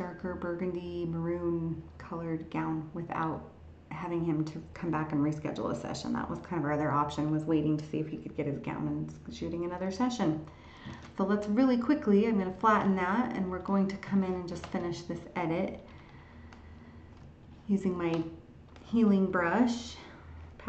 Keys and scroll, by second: 10.9 ctrl+shift+e.